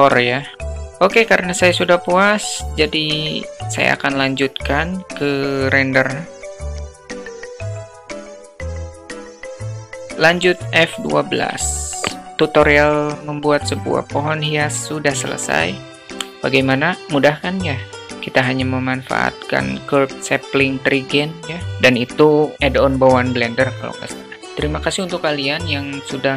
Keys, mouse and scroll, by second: 3.5-5.9 drag, 6.7 click, 6.9 click, 7.7 click, 8.4 click, 8.7 click, 9.7 click.